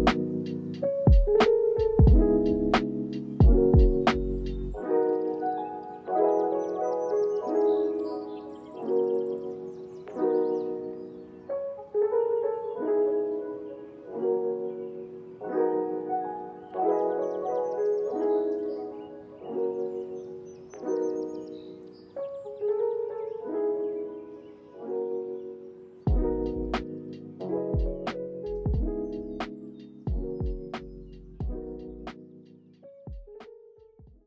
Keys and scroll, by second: 4.0 ctrl+s, 5.3 space.